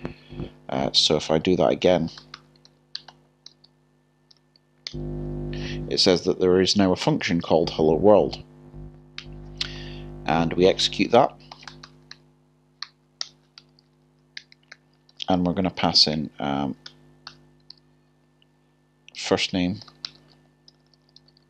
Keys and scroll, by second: 4.3 typing, 4.9 Return, 11.1 o, 12.8 typing, 14.4 Return, 16.1 typing, 17.3 k, 18.9-19.8 typing.